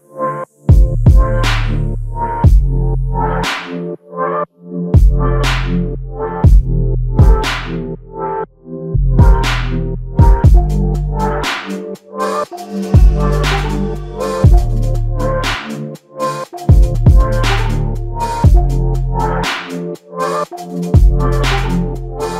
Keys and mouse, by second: 7.2 double click, 11.8 typing, 13.1 double click, 18.8 alt+click, 20.8 double click.